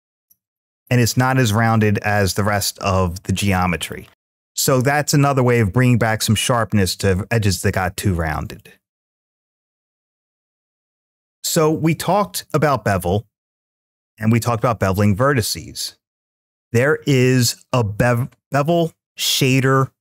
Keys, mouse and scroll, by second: 1.6-3.7 middle drag, 4.1 shift+middle click, 4.1-4.7 scroll up 2, 7.5-8.4 middle drag, 9.7 x, 11.4-12.0 middle drag, 13.4 click, 14.2-16.5 drag.